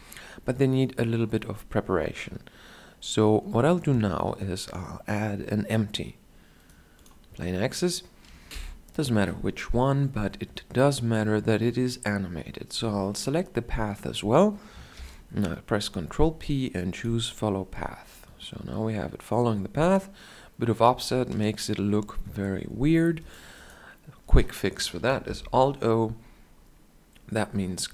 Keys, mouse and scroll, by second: 3.6 shift+a, 14.7 ctrl+p, 27.8 shift+Left, 27.8 shift+Down.